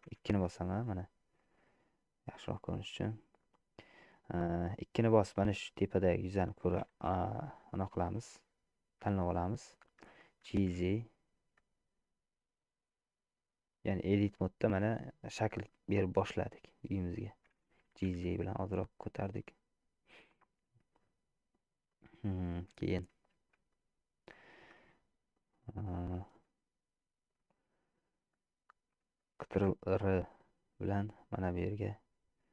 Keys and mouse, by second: 0.3 2, 0.5-2.2 middle drag, 2.5 middle click, 3.5 click, 4.7-5.8 middle drag, 10.5 g, 14.7-17.5 middle drag, 18.2 g, 19.6-21.5 middle drag, 22.0 middle click, 23.0 shift+middle click, 23.8 shift+middle click, 24.9 middle click, 29.7 ctrl+r.